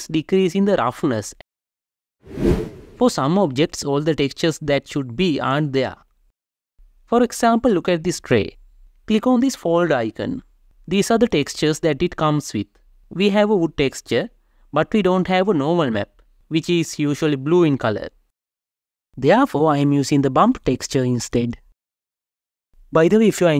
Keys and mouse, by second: 4.7 click, 7.9 click, 9.6 click, 17.6 right click, 21.8 click.